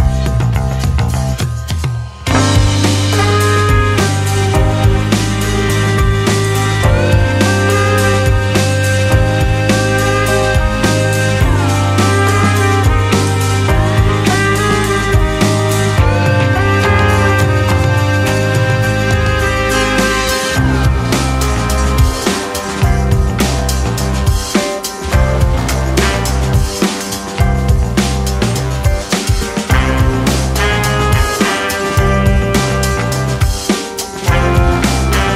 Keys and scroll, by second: 3.3 ctrl+[, 11.7 space, 13.2 space, 15.9 space, 20.6 ctrl+c, 20.7 ctrl+v, 25.7 ctrl+KP_0, 26.3 2, 27.2 ctrl+c, 27.7 Escape, 28.3 ctrl+c, 28.4 ctrl+shift+v, 33.9 g, 34.6 Escape.